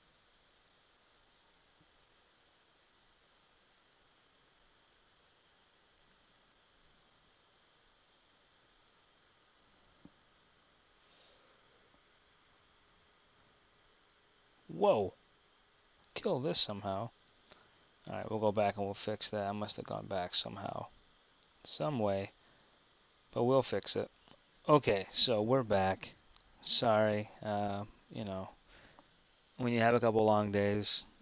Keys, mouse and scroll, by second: 6.1 Tab, 10.1 middle click, 24.1 Tab, 24.3 KP_1, 25.0 Tab.